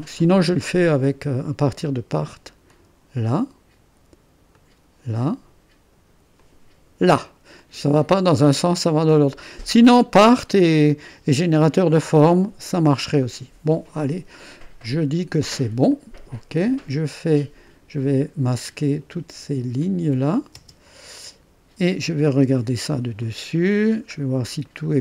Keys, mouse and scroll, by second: 0.7-1.7 drag, 2.7-5.5 drag, 6.4 click, 7.6-9.8 middle drag, 9.9 middle click, 10.7 middle click, 12.4-14.2 drag, 15.9 click, 17.6 click, 19.4 ⌨, 19.8 click, 20.5 space, 22.4 space, 23.2 click.